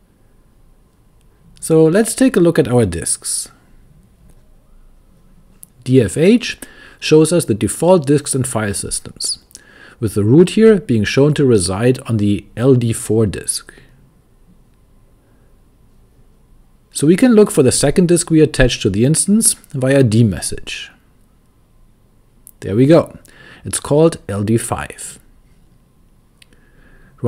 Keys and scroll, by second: 7.9-10.2 typing, 16.3-18.9 typing, 19.7 Return, 25.1-27.2 typing.